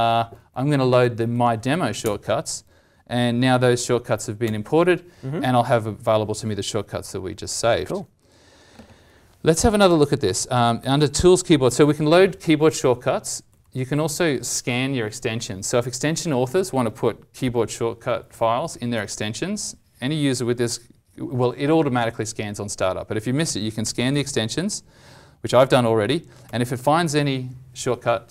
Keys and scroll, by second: 9.7 alt+t.